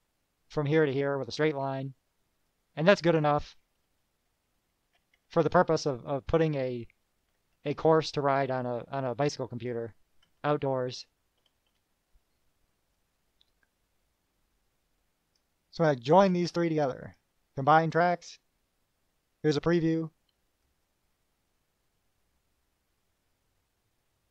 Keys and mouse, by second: 2.7 click, 4.4 -, 6.3-6.8 drag, 7.5 -, 9.2-10.0 drag, 10.9 KP_Subtract, 11.6 KP_Add, 13.1-13.7 drag, 15.5 click, 16.3 shift+click, 17.2 right click, 17.8 click, 20.8 click.